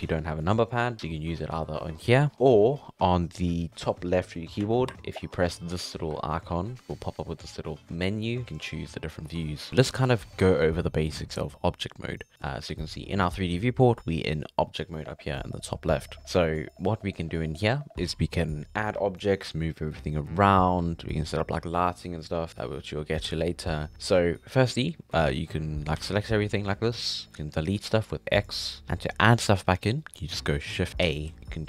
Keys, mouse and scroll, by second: 0.0 click, 6.1 `, 6.8 `, 10.3 middle click, 10.4-11.1 shift+scroll up 3, 11.2 middle click, 12.1 scroll down 1, 12.3-26.0 middle drag, 26.0 a, 28.4 x, 28.8-31.6 shift+middle drag.